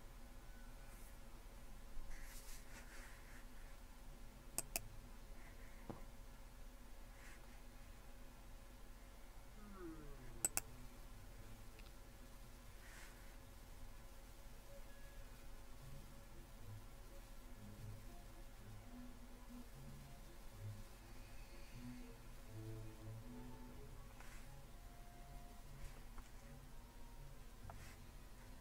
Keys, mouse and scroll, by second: 4.6-6.9 drag, 10.5-11.7 drag.